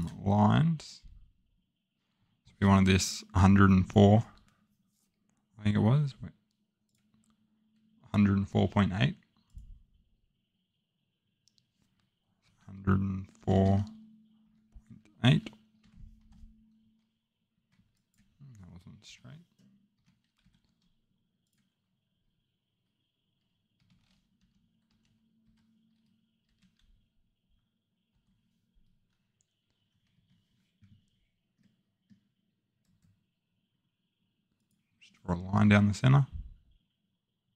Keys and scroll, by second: 12.4-14.4 typing, 15.8-16.6 typing, 17.5 Escape, 19.0 Delete, 19.9 Escape, 20.4 l, 25.5-26.4 typing, 28.1 Return, 30.2 Escape, 36.1-36.5 scroll down 2.